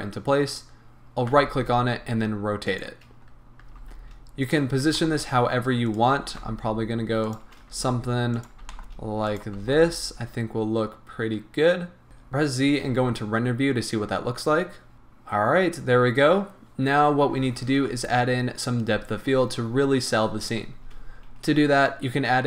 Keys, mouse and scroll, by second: 0.5 click, 1.3 r, 2.8 click, 3.2 scroll up 1, 3.7 g, 4.5 click, 4.8 g, 6.0 click, 6.2 r, 7.4 shift+click, 7.7 g, 8.5 click, 8.7 g, 9.4 click, 9.6 g, 12.1 z, 14.9 shift+click, 17.3 z, 21.3-22.4 scroll up 2.